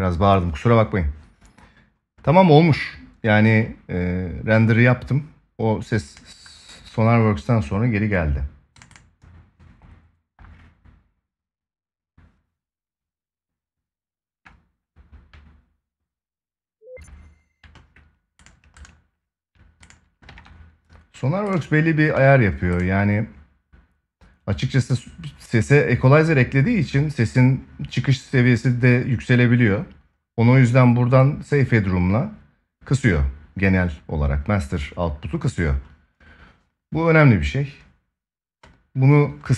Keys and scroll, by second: 20.0 ctrl+s.